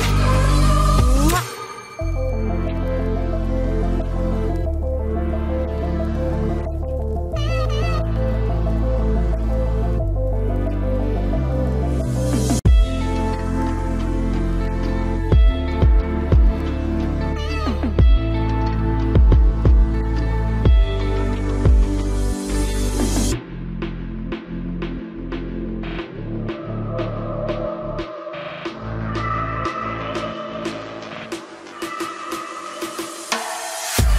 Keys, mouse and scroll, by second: 0.8-2.5 drag, 2.7 ctrl+b, 5.1 ctrl+s, 6.2 KP_3, 6.6 Tab, 7.5 ctrl+s, 8.0 z, 11.4 z, 12.3 Tab, 12.6 z, 15.6 ctrl+r, 16.7 ctrl+r, 18.7 ctrl+Tab, 21.0 click, 21.0 right click, 22.7 g, 22.8 right click, 23.7 right click, 23.9 g, 24.6 g, 26.3 ctrl+Tab, 29.1 c, 30.0-31.0 right drag, 31.2 right click, 32.1 i, 33.5 KP_Decimal.